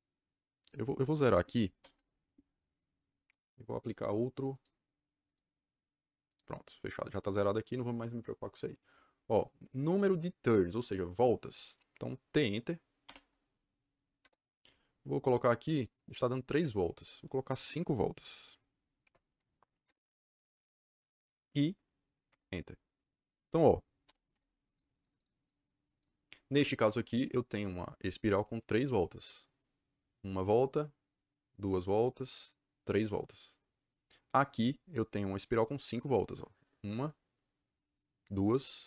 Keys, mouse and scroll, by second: 1.7 KP_0, 1.9 KP_Enter, 3.2 KP_Enter, 4.5 click, 5.2 click, 6.2 click, 12.9 t, 14.1 KP_Enter, 18.9 KP_5, 19.8 KP_Enter, 22.2 KP_Enter, 24.0 m, 24.2 Return, 24.6 click, 24.8 click, 25.3 click, 25.9 click, 26.4 Escape.